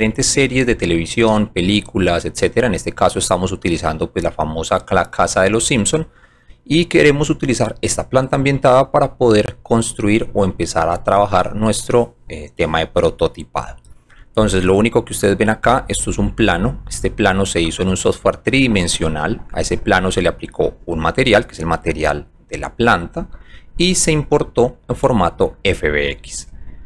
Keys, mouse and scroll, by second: 2.9-4.0 alt+drag, 4.2 alt+middle click, 5.0 alt+middle click, 5.7 alt+middle click, 7.0-8.1 alt+drag, 8.4-9.0 alt+middle drag, 9.4 alt+click, 15.0 alt+click, 16.8 alt+click, 17.1 alt+click, 18.4 middle click, 18.7 middle click, 18.9 middle click, 19.4 middle click, 20.1-22.2 alt+drag.